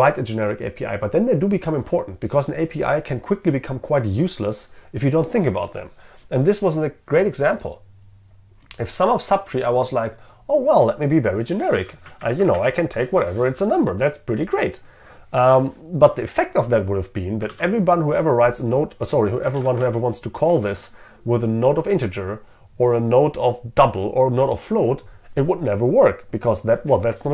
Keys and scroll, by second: 12.3 ctrl+shift+Right, 13.0 ctrl+shift+Left, 17.7 ctrl+Tab.